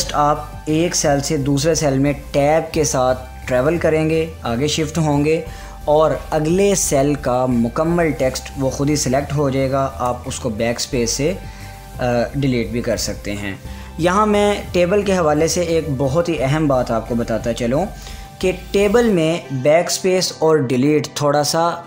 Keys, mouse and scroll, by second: 4.0 click, 5.7 Tab, 11.6 Tab, 12.0 ctrl+z.